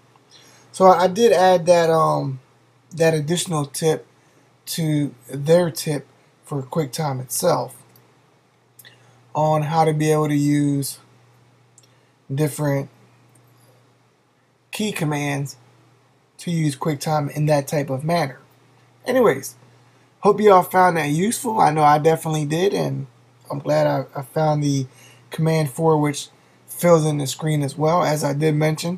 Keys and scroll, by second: 7.8 super+1, 13.3 Escape.